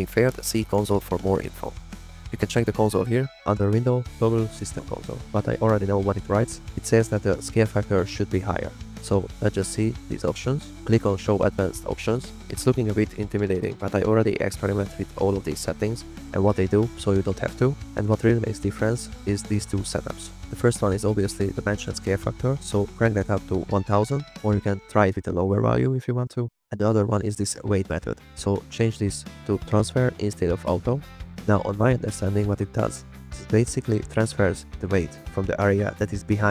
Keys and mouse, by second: 1.8-2.8 drag, 3.3-4.4 drag, 9.1-36.5 drag.